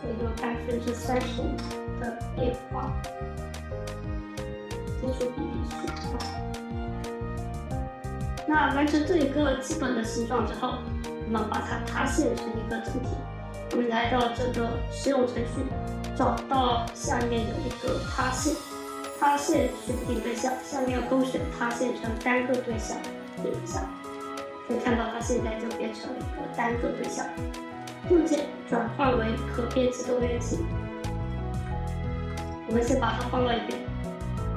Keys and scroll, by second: 0.5-1.5 typing, 5.3-6.3 typing, 32.9 w.